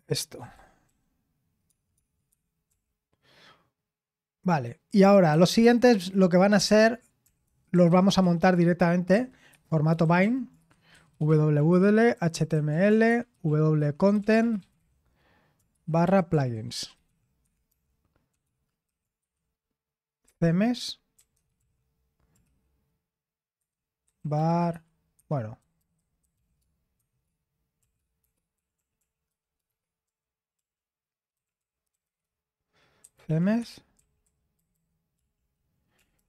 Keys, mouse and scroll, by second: 0.0-3.2 typing, 5.3-22.5 typing, 23.6-36.2 typing.